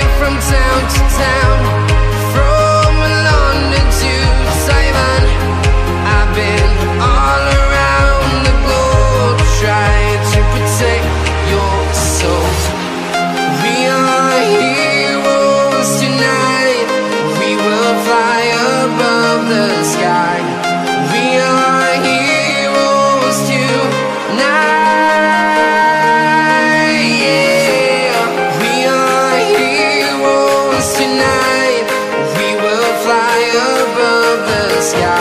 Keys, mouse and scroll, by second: 1.3-2.4 scroll down 1, 3.2 click, 4.5 a, 4.9 space, 5.1 t, 5.3 Down, 6.4 Return, 7.7 click, 8.8 click, 9.7-10.3 scroll down 1, 10.3 scroll up 1, 10.6 click, 11.9 Tab, 12.8 click, 13.5 Return, 13.9 right click, 20.6 click, 22.7 click, 24.3 Return, 24.5 click, 27.2 KP_9, 27.3 click, 29.2 click, 30.3 s, 31.2 s, 32.5 click.